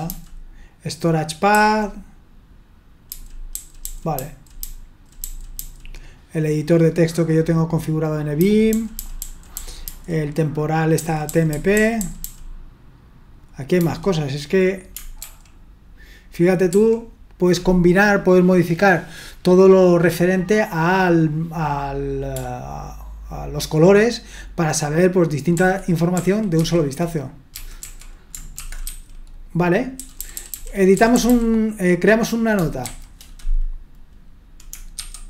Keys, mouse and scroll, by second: 1.5 typing, 3.1-5.6 typing, 8.4-9.8 typing, 10.9-12.2 typing, 13.8 d, 15.2 ctrl+d, 16.7 ctrl+d, 25.6 ctrl+d, 26.2 ctrl+d, 26.6 ctrl+d, 27.5-28.9 typing, 30.0-31.5 typing, 32.8 typing, 35.0-35.2 typing.